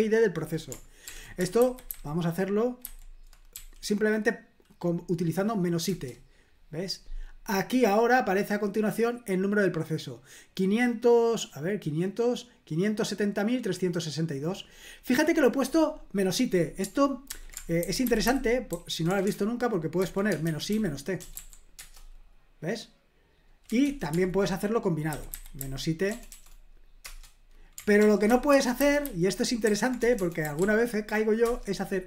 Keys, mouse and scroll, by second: 1.1 ctrl+p, 1.6 alt+b, 1.9 alt+b, 2.8 alt+b, 3.5 i, 6.1 Return, 7.8-9.8 drag, 12.3 click, 12.9 middle click, 14.4 click, 17.3 ctrl+p, 17.8 alt+b, 18.0 alt+b, 18.2 alt+b, 18.7 alt+f, 19.1-21.3 typing, 21.8 Return, 23.8 ctrl+p, 25.1 alt+b, 25.3 alt+b, 25.6 alt+b, 26.1 BackSpace, 26.3 BackSpace, 27.0 Return, 28.0 ctrl+p, 28.5 alt+b, 28.8 alt+b, 29.0 alt+b, 29.7 alt+f, 30.0-31.1 typing, 31.4 Return.